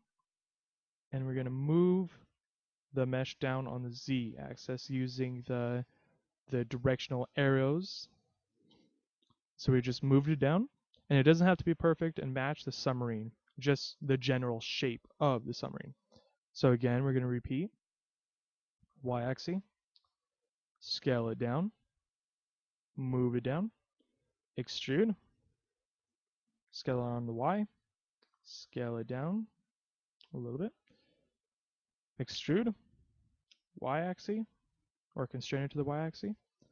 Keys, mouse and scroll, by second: 0.1 click, 2.1 click, 6.2 middle click, 8.8 KP_3, 16.2 e, 19.8 click, 20.1 s, 21.4 click, 22.4 click, 24.7 e, 27.7 click, 28.3 s, 31.3 click, 32.3 e, 34.6 click, 36.3 s.